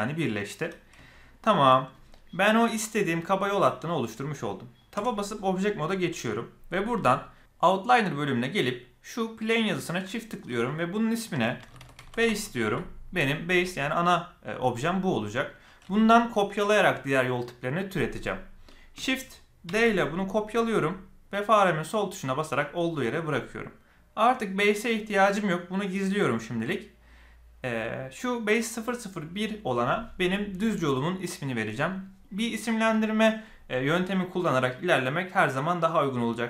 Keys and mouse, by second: 1.0-1.6 shift+middle drag, 4.9 Tab, 10.0-13.5 drag, 19.6 shift+d, 25.7 click.